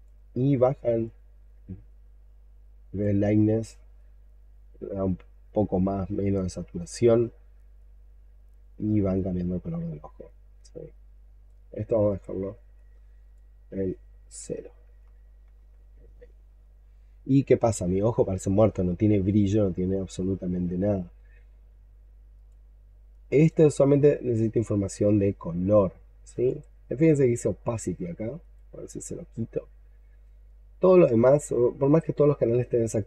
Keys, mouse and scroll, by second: 14.8 0, 15.4 Return.